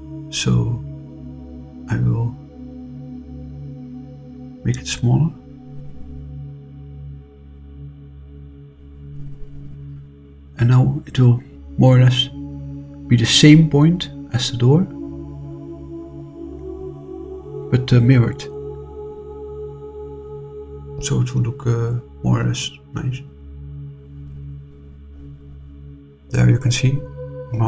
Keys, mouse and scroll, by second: 0.6-3.4 drag, 4.2 click, 4.8-6.8 drag, 10.1 click, 10.9-13.9 drag, 15.0 click, 15.6-20.2 drag, 23.1 click, 24.5-25.3 scroll up 2, 25.3 middle click.